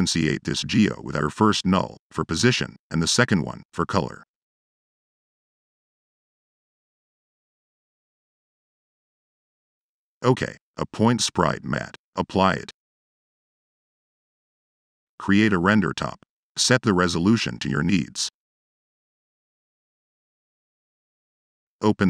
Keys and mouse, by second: 0.3 drag, 0.7 click, 1.0 click, 1.6 click, 3.7 click, 4.1-4.6 drag, 4.8 click, 7.9 click, 8.1 click, 9.3 click, 9.5 click, 9.6 Tab, 10.1 click, 10.7 click, 11.1 click, 11.4 drag, 14.3 click, 14.4 Tab, 14.9 click, 15.2-16.0 typing, 16.6 click, 17.7 click, 18.2 click, 18.6 click, 19.0 click, 19.9 click, 21.0 click.